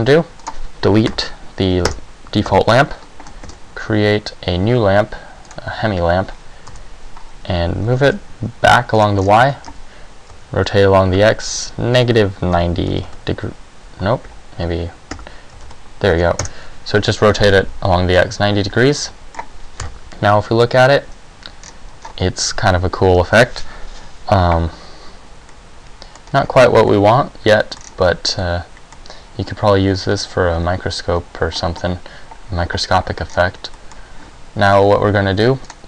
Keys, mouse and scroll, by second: 0.7 right click, 1.3 Delete, 2.7 KP_7, 3.5 shift+a, 6.9 KP_3, 8.0 g, 9.1 click, 9.3 scroll down 3, 9.5 r, 12.1 r, 15.3 r, 19.0 middle click, 20.0 KP_0.